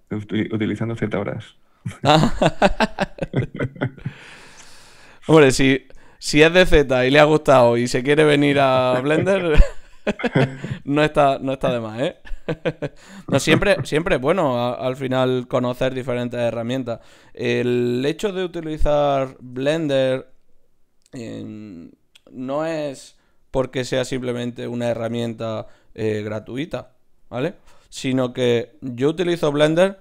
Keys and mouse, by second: 0.4-2.2 drag, 1.9 g, 2.9-6.2 drag, 3.8 g, 4.9-6.2 right drag, 5.4 g, 6.2-8.2 middle drag, 7.5 g, 8.2-11.1 right drag, 8.3 g, 8.8-11.1 drag, 9.6 g, 10.3 middle click, 11.1-12.8 middle drag, 13.7-14.8 right drag, 14.8-15.8 drag, 14.8 g, 17.8 click, 18.3-19.6 right drag, 19.6-21.2 drag, 21.2-26.0 middle drag, 26.0 d, 26.1-29.2 drag.